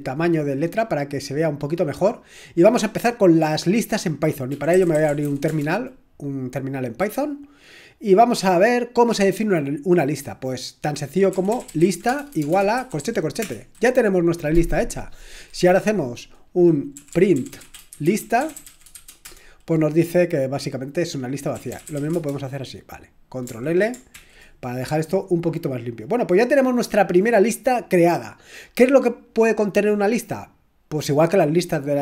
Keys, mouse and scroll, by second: 4.3-5.7 typing, 11.2-13.4 typing, 16.7-19.4 typing, 21.3-22.4 typing, 24.1 ctrl+l.